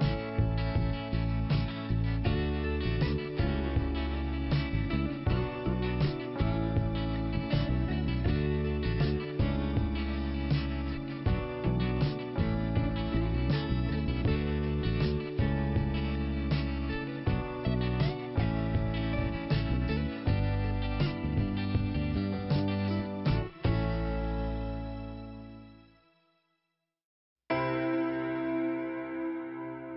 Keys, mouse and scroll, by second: 2.9 click, 5.4 scroll down 1, 5.7 click, 5.8 click, 8.3 middle click, 15.2 scroll down 2, 20.4 middle click, 21.4 f, 22.4 click, 25.3 click, 27.6 click, 28.9 click.